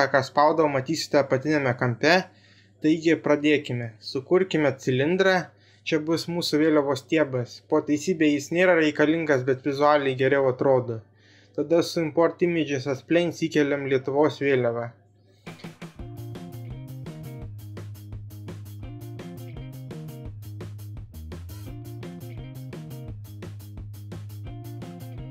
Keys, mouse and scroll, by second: 3.1 shift+a, 6.1 s, 8.0 z, 8.9 click, 9.2 s, 11.6 z, 13.9 s, 15.9 shift+a.